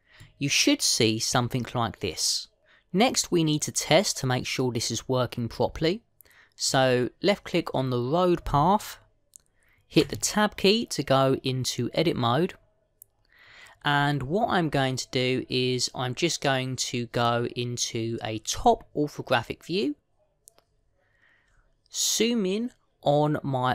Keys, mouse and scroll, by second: 1.1 middle click, 7.6 click, 10.9 Tab, 18.1 click.